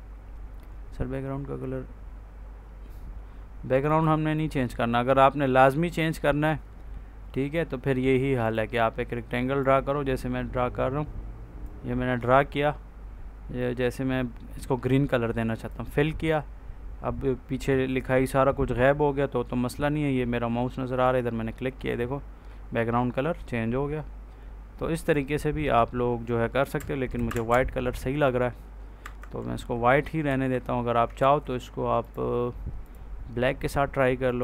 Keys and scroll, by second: 27.1 Delete, 28.9 F4, 30.2 ctrl+s.